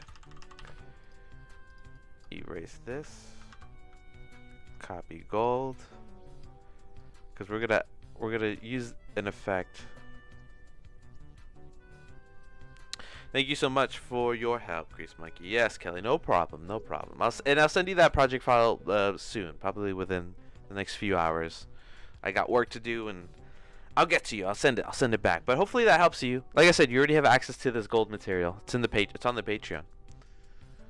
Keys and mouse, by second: 0.0 ctrl+c, 0.1 ctrl+c, 0.3 ctrl+c, 0.4 ctrl+c, 0.5 ctrl+c, 2.0 click, 3.0 x, 3.6 ctrl+v, 4.6 click, 5.4 click, 5.8 click, 7.0 click, 8.3 click, 9.0 middle click.